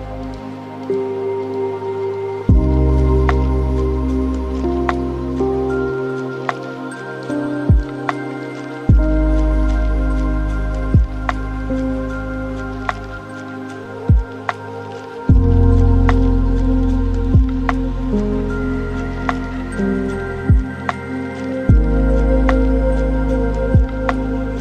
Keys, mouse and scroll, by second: 2.1 drag, 3.8-6.1 middle drag, 6.1 shift+a, 10.7 drag, 12.3-15.5 middle drag, 15.5-18.4 drag, 18.4-20.6 middle drag, 20.6-23.6 drag, 24.2-24.6 drag.